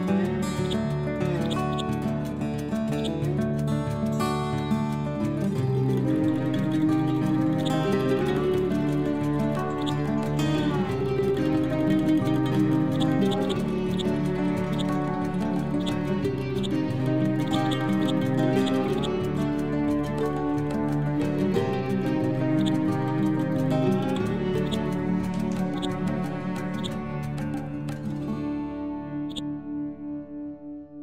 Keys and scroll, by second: 3.9 F12, 4.8 4, 5.1 Return, 10.5 Right, 11.2 Down.